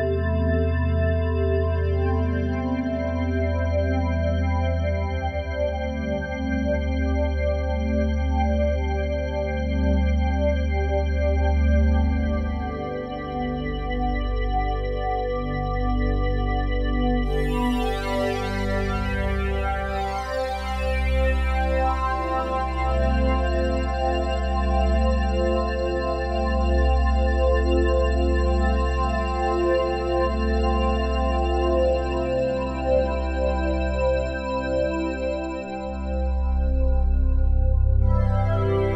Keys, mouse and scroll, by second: 0.0-2.4 typing, 1.3 ctrl+a, 3.6-5.2 typing, 6.0 Tab, 6.6-9.3 ctrl+alt+drag, 9.3 ctrl+s, 12.9-21.2 drag, 22.8-33.4 drag, 22.8 typing, 28.6 typing, 31.1 space, 33.4 space, 34.3-38.9 drag, 36.2 typing.